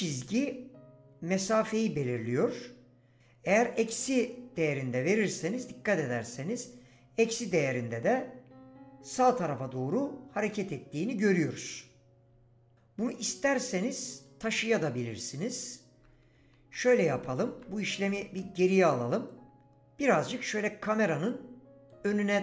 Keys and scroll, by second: 16.5 ctrl+z.